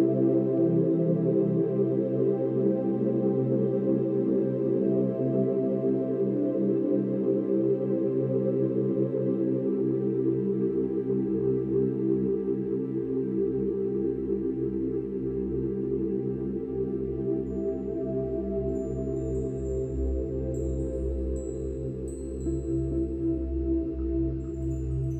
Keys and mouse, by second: 1.5 click, 1.9 click, 3.0 click, 4.4-9.8 drag, 6.1 Delete, 9.8 ctrl+d, 10.4-11.5 ctrl+drag, 11.5 shift+Right, 11.7 shift+Right, 12.0 shift+Right, 15.2 Right, 15.6 Right, 16.6 Right, 18.2 click, 19.6 click, 20.9 click, 21.9 click, 22.9 Delete.